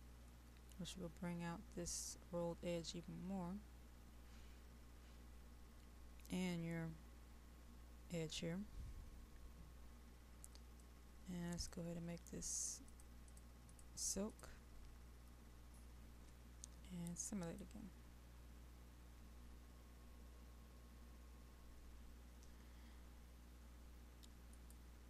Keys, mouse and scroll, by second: 0.8 KP_5, 10.8-15.3 drag.